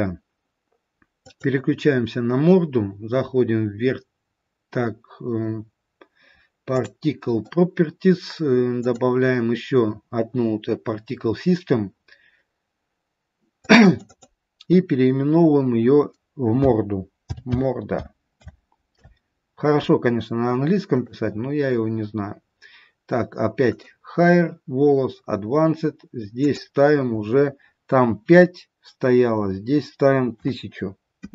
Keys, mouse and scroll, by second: 6.7 click, 8.7 click, 14.0 click, 14.7 click, 21.5 click, 24.2 click.